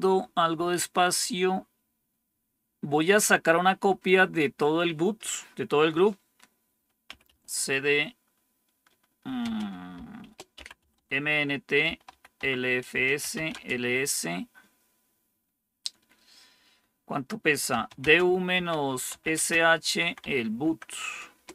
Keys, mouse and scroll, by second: 6.7-7.7 typing, 9.3-13.3 typing, 12.3 Tab, 12.8 Return, 13.4 Return, 17.4-20.6 typing, 21.2 Return.